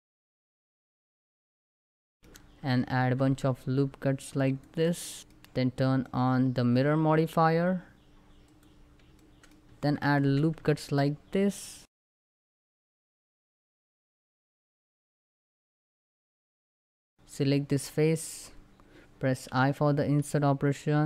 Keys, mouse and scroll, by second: 0.1 ctrl+click, 0.9 click, 1.2 middle click, 1.9 scroll down 1, 2.1 middle click, 2.2-2.6 scroll up 2, 2.4 ctrl+r, 2.7 click, 2.9 right click, 3.4 click, 3.5 shift+middle click, 3.8 ctrl+r, 3.8 ctrl+scroll up 2, 4.3 click, 4.5 right click, 4.7 click, 4.9 scroll up 1, 5.7 middle click, 6.4 scroll up 1, 8.2 click, 8.8 shift+middle click, 9.7 ctrl+r, 9.7 ctrl+click, 11.6 ctrl+click, 11.6 ctrl+r, 11.7 ctrl+click, 12.4 middle click, 12.4 scroll down 2, 12.5 shift+middle click, 12.8 scroll up 3, 12.9 middle click, 13.1 ctrl+r, 13.2 ctrl+click, 14.0 scroll down 1, 14.1 shift+middle click, 14.2 scroll up 1, 14.5 ctrl+r, 14.6 ctrl+click, 14.9 scroll down 1, 15.0 middle click, 15.3 a, 15.5 shift+middle click, 15.6-16.1 scroll up 2, 15.7 middle click, 16.1 ctrl+r, 16.2 ctrl+click, 16.8 Tab, 16.9 middle click, 17.2 scroll up 1, 17.3 click, 19.2 i.